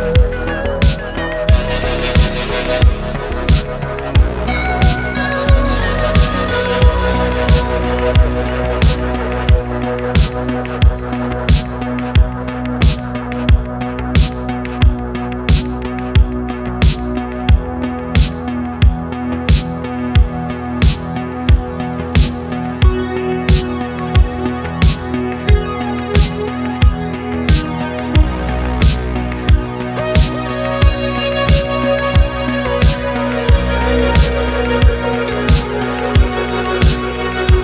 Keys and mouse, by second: 0.5 middle drag, 1.1-2.7 middle drag, 3.0-3.5 middle drag, 3.8 middle click, 5.2-5.8 middle drag, 5.9-6.4 middle drag, 6.7 middle click, 11.9-12.7 middle drag, 15.2 middle click, 17.9 middle click, 18.5-19.4 middle drag, 19.9 middle click, 20.3 middle drag, 20.9 click, 21.2-21.8 middle drag, 22.0 middle click, 22.5 g, 23.0 z, 26.0 Escape, 26.4 middle drag, 26.9 middle click, 27.8 click, 30.3 click, 32.5 click, 33.7 middle click, 34.0 middle click, 34.5 click, 37.5 click.